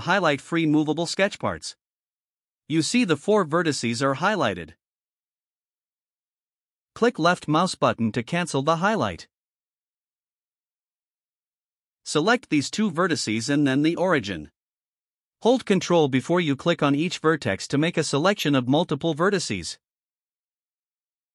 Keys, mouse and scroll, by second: 7.9 click, 12.5 click, 17.6 ctrl+click.